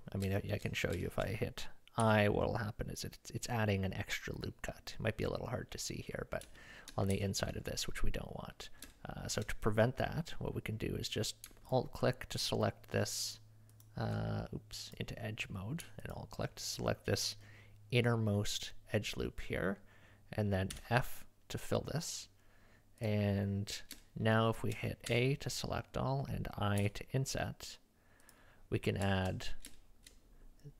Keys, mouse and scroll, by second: 0.4 shift+middle click, 1.1 shift+middle click, 2.0-2.6 scroll up 1, 2.6-4.3 scroll up 1, 4.3-5.2 scroll up 1, 5.4 middle click, 7.1 ctrl+z, 8.9 shift+middle click, 9.0 shift+click, 12.4 alt+click, 13.3 alt+click, 14.8 click, 16.1 alt+click, 20.7 f, 24.0 shift+middle click, 24.5 shift+middle click, 25.1 a, 26.8 i, 29.7 shift+middle click.